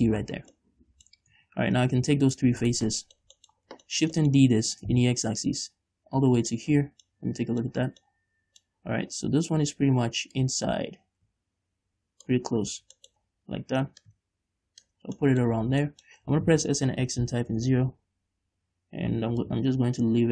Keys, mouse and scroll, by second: 0.6 scroll down 1, 0.9-2.6 middle drag, 1.5 scroll up 2, 1.7 Tab, 2.6 shift+right click, 3.0 shift+right click, 3.2 scroll down 1, 3.4 middle click, 4.0 scroll down 1, 4.4-6.8 middle drag, 5.0 shift+d, 6.9 click, 7.2 scroll down 2, 7.4-9.5 middle drag, 9.5-10.0 scroll up 2, 10.0-10.7 scroll up 1, 10.7-12.6 drag, 12.8 scroll up 1, 13.3 shift+middle click, 14.4 click, 15.4 scroll down 1, 15.5 middle click, 15.9 scroll up 1, 16.2 shift+middle click, 16.6 s, 18.0 Return, 19.8 click.